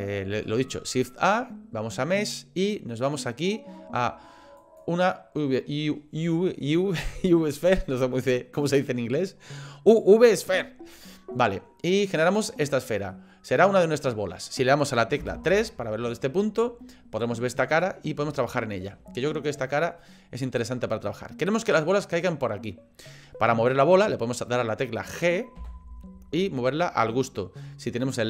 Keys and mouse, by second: 13.1-15.2 middle drag, 15.2 KP_3, 18.3 shift+middle click, 25.6 g.